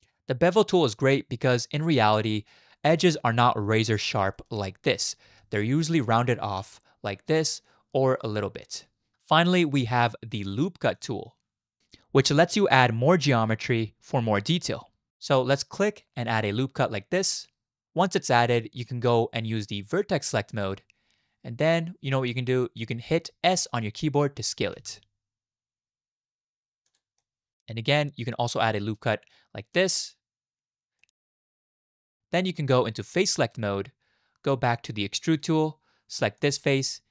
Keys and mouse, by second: 1.5 shift+click, 3.4 shift+click, 3.5 shift+middle click, 4.3 click, 5.4 shift+click, 5.5 shift+middle click, 5.7 shift+click, 11.0 click, 17.4 click, 17.8-18.8 middle drag, 20.5 click, 21.6-23.3 middle drag, 24.7 s, 27.2 middle click, 29.7 click, 31.0 middle click, 31.8 shift+middle click, 32.1 middle click, 33.5 click, 35.4-36.4 drag, 36.9 middle click.